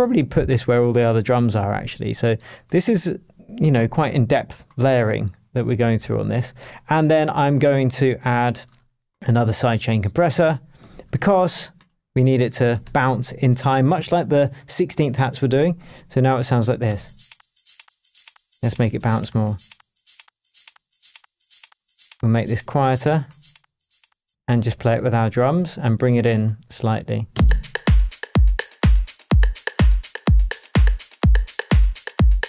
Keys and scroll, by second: 1.6 super+c, 3.0 super+v, 3.7 super+d, 5.9 super+l, 10.8 super+c, 12.8 super+v, 16.8 space, 24.2 space, 24.8 super+space, 27.3 super+space, 28.2 space.